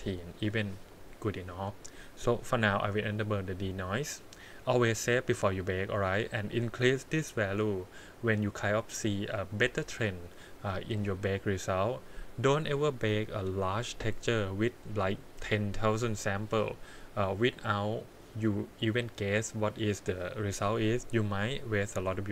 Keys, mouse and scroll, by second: 3.0 click, 4.2-6.0 scroll down 3.